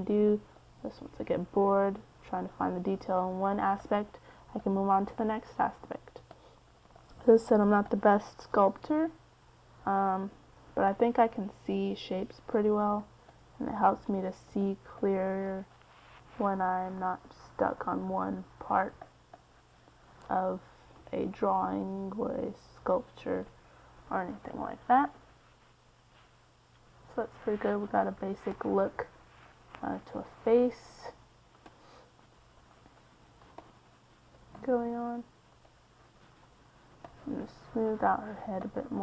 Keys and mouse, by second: 1.3-11.8 drag, 12.1 middle click, 13.6 f, 14.7-16.4 drag, 17.9 middle click, 26.8 f, 27.7-30.7 drag.